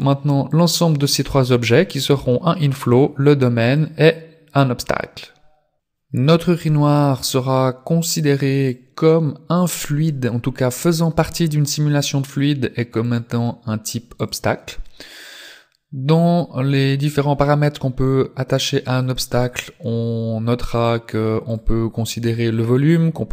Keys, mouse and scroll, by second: 0.5 right click, 1.7 right click, 2.8 right click, 3.7 right click, 8.8 click, 13.0 click, 18.6 click.